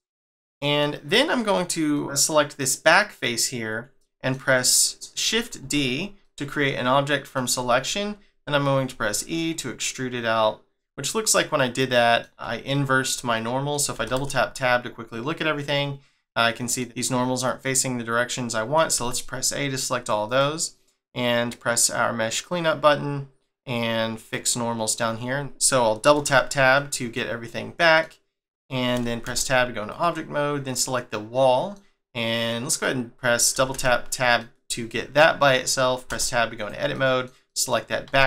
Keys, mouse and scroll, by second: 1.4 click, 1.9 middle click, 5.6 shift+d, 6.2 middle click, 10.7 middle click, 12.3 e, 12.7 middle click, 13.9 Tab, 14.5 middle click, 17.0 middle click, 18.9 a, 20.2 click, 24.2 click, 26.7 middle click, 27.5 middle click, 29.2 Tab, 29.9 click, 30.7 middle click, 34.3 middle click, 36.1 Tab, 36.5 click, 36.9 middle click, 37.4 middle click, 38.0 x.